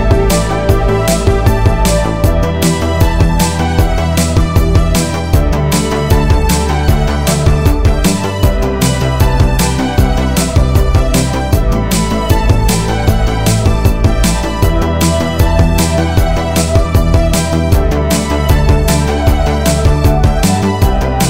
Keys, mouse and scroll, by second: 0.6-1.3 middle drag, 1.5-2.4 scroll up 2, 3.0-4.1 drag, 3.0-3.6 scroll up 1, 5.8 click, 8.1-8.9 scroll up 2, 10.0 Tab, 11.8 click, 12.8-14.0 drag, 15.0 x, 16.5 click, 17.2 Tab, 19.9 click.